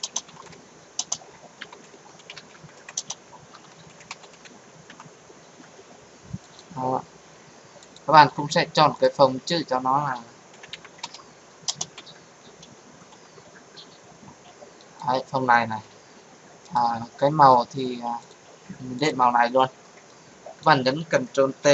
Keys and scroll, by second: 21.4 ctrl+t.